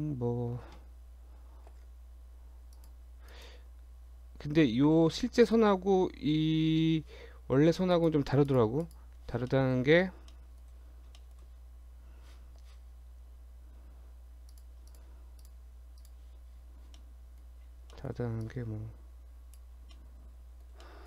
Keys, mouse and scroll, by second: 1.7 ctrl+r, 5.4 click, 6.1 scroll up 1, 6.3 Tab, 6.8 Tab, 7.9 click, 8.5 click, 9.5 shift+middle click, 9.9 Tab, 10.4 middle click, 10.8 Tab, 11.1 shift+scroll down 1, 11.2 shift+middle click, 14.2 3, 14.6 click, 14.9 shift+click, 15.4 click, 17.0 middle click, 17.7 scroll down 2, 17.9 shift+middle click, 18.5 click, 20.0 middle click, 20.9 middle click.